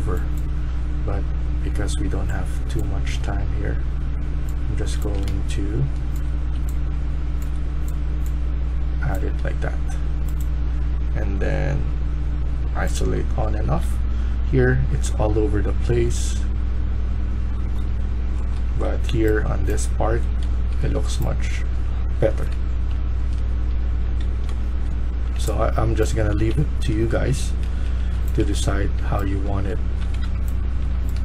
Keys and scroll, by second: 2.9 typing, 4.6-7.3 typing, 10.0-10.7 typing, 13.0-15.7 typing, 18.4-19.5 typing, 20.5 Escape, 20.7 Escape, 21.4-22.9 typing, 24.2-25.1 typing, 26.2-31.2 typing, 28.3 Escape.